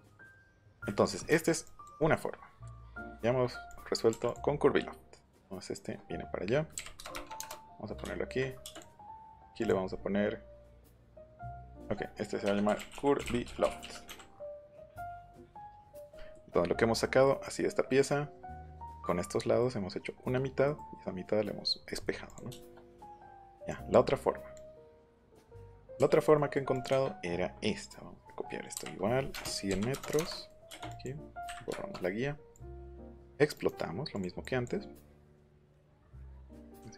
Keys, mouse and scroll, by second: 1.6 click, 2.6 Escape, 3.7 click, 4.1 m, 4.2 click, 6.7 KP_2, 6.9 KP_0, 7.4 KP_Enter, 8.7 click, 9.2 click, 9.6 click, 9.8 middle click, 9.8-10.3 scroll down 1, 11.2 click, 11.7 click, 12.4 Caps_Lock, 12.6-14.5 typing, 15.6 click, 16.1 shift+middle click, 16.4-16.9 scroll up 2, 17.0 middle click, 17.8 middle click, 18.6 click, 19.3 middle click, 20.6 middle click, 21.6 middle click, 21.9 scroll up 1, 22.2 click, 22.4 shift+middle click, 23.4 click, 23.6 click, 24.5 click, 25.4 click, 25.9 m, 26.7 click, 28.7-30.6 typing, 30.2 KP_Enter, 30.8 click, 31.4 Delete, 32.5 click, 33.5 right click, 34.1 click, 35.3 right click, 36.1 click, 36.3 click.